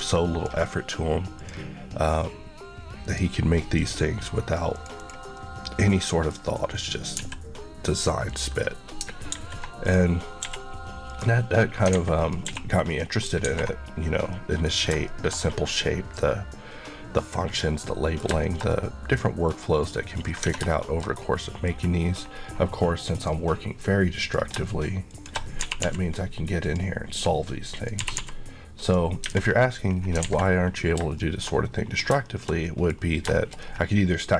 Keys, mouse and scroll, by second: 5.0 click, 5.4 middle click, 7.2 x, 8.3 click, 9.3 alt+a, 9.8 click, 10.3 scroll up 1, 10.5 q, 11.1 click, 12.0 alt+a, 12.2 click, 12.5 q, 12.9 click, 13.5 alt+a, 14.4 middle click, 14.8-15.1 scroll down 2, 15.1 shift+middle click, 15.5 scroll down 1, 15.7 middle click, 19.5 scroll up 1, 20.2 click, 20.6 shift+Tab, 20.7 shift+middle click, 22.5-23.2 scroll up 1, 23.2 click, 25.7 typing, 26.7 click, 28.0 typing, 28.9 click, 29.4 scroll down 1, 30.3 alt+a, 30.8 scroll down 1, 31.2 shift+middle click, 31.9 scroll down 1, 32.3 shift+middle click, 33.0 shift+scroll up 1, 33.4 shift+middle click, 33.6-34.0 shift+scroll up 2.